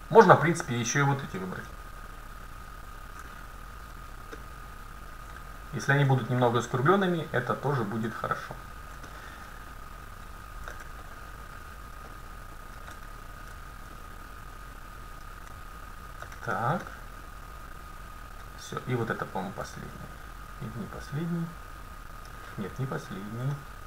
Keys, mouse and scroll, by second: 1.1 middle click, 2.2-4.9 right drag, 4.4-6.1 middle drag, 5.9-8.2 right drag, 6.3-8.2 middle drag, 8.7-12.5 right drag, 9.1-10.8 middle drag, 11.4 middle click, 14.5-15.9 middle drag, 16.0-18.1 right drag, 16.9-19.1 middle drag, 19.4-21.6 right drag, 20.0 middle click, 20.6 click, 20.7-21.9 middle drag, 23.2-23.8 right drag, 23.6-23.8 middle drag.